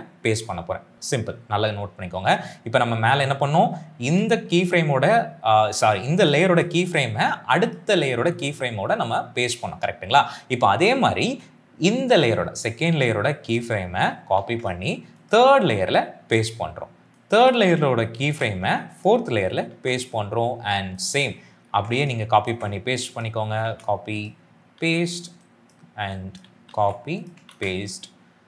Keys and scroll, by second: 14.3 ctrl+c, 16.1 ctrl+v, 18.1 ctrl+c, 19.6 ctrl+v, 21.6 ctrl+c, 22.3 ctrl+v, 23.5 ctrl+c, 24.7 ctrl+v, 26.6 ctrl+c, 27.4 ctrl+v.